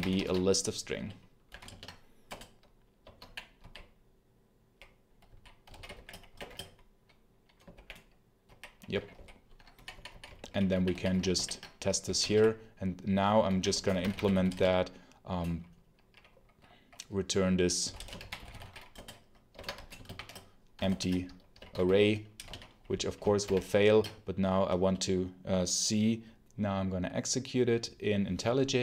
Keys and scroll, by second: 0.0-1.4 typing, 1.5 ctrl+space, 2.1 Return, 2.8-14.8 typing, 11.2 ctrl+alt+l, 11.9 Escape, 17.4-19.8 typing, 19.4 Escape, 20.7 ctrl+shift+Return, 21.4-22.3 typing, 23.3 ctrl+alt+shift+0.